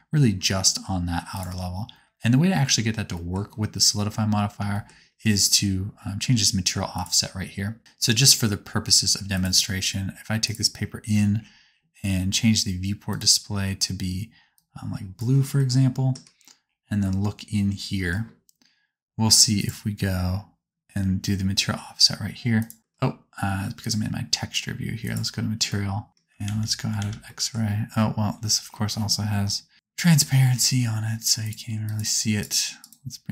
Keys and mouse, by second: 0.3-1.3 drag, 1.3-6.9 middle drag, 6.9-9.4 drag, 9.4 middle click, 10.3 click, 10.5-13.0 middle drag, 13.0 click, 13.1-22.5 middle drag, 22.5-27.0 drag, 26.4 alt+z, 27.0 alt+z, 29.7-33.3 middle drag.